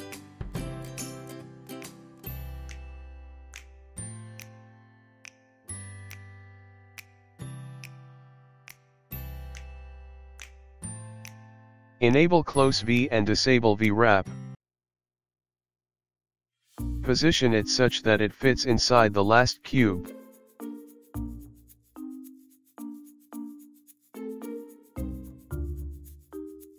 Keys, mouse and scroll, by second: 4.5 click, 14.8 shift+middle click, 14.8-15.7 scroll down 2, 16.8 typing, 20.1 g, 26.6-26.7 scroll up 4.